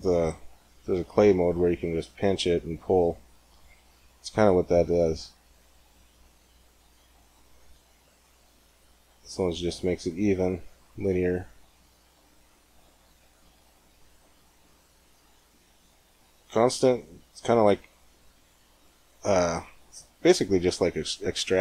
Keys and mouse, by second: 4.7-6.6 drag, 7.7 g, 12.4-14.3 drag, 14.3 g.